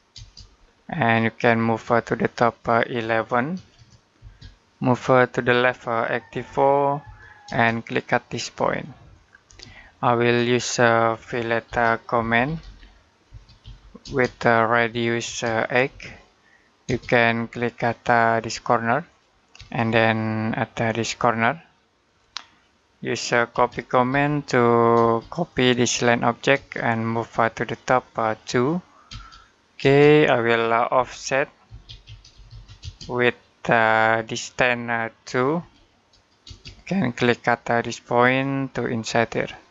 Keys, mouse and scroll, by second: 0.4-1.0 scroll down 1, 1.0 middle click, 3.4-4.0 typing, 6.1-7.3 typing, 8.9 click, 9.3 space, 9.6 middle click, 10.1-10.5 scroll up 1, 10.5 middle click, 11.5-16.7 typing, 18.2 click, 19.3 space, 20.6 click, 23.3-24.8 typing, 25.3 click, 26.4 space, 26.8 click, 28.3 2, 28.9 space, 30.8-32.6 typing, 35.4 2, 36.3 space, 38.1 click.